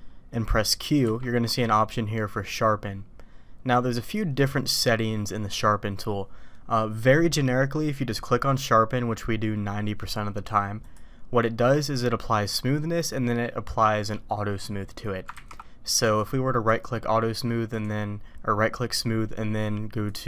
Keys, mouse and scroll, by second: 1.0 q, 15.3 ctrl+z, 16.0-16.8 drag, 17.7 click, 20.1 click.